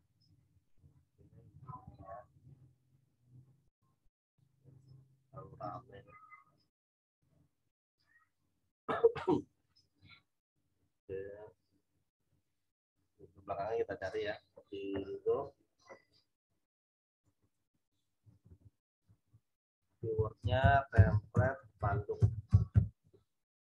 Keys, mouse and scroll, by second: 2.0 click, 6.8-12.2 drag, 15.0 scroll up 1, 17.2 click, 18.2 t, 20.0 typing, 21.3 space, 23.0 Return.